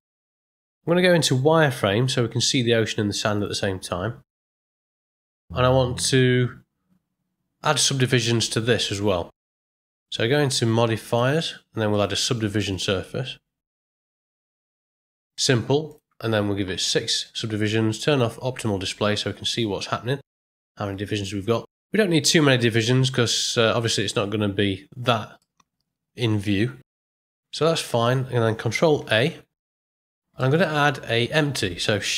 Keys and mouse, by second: 0.2-0.8 middle drag, 1.7 z, 3.8-4.3 middle drag, 4.6 ctrl+middle click, 5.0 shift+middle drag, 6.0 click, 9.9 click, 11.9-14.2 drag, 15.3 click, 15.9-17.5 drag, 18.1 click, 21.7-23.4 middle drag, 23.8-25.0 ctrl+middle drag, 25.4-26.4 middle drag, 28.0 click, 29.1 ctrl+a, 29.8 middle click, 30.4 ctrl+middle click.